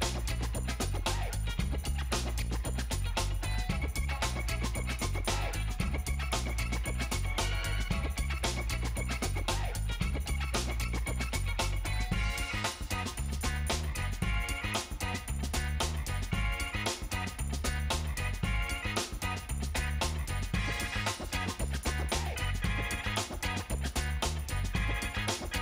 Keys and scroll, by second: 5.1 space, 14.1 5, 14.8 Return.